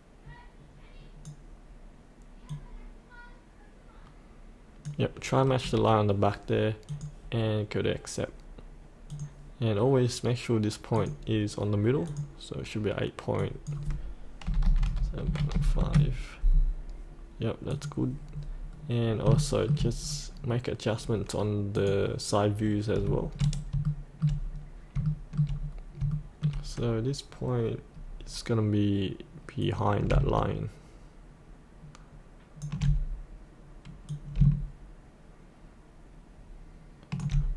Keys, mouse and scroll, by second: 9.8 click, 14.4 KP_8, 14.8 KP_7, 15.2 KP_Decimal, 15.5 KP_5, 17.7 click, 18.7-19.2 scroll down 1, 19.3 shift+middle click, 20.7-21.7 scroll down 1, 21.7 click, 22.5-23.0 scroll up 1, 23.8 shift+middle click, 24.5-24.9 scroll up 1, 25.0 shift+middle click, 25.5-26.0 scroll down 1, 26.1 shift+middle click, 29.6-37.2 drag.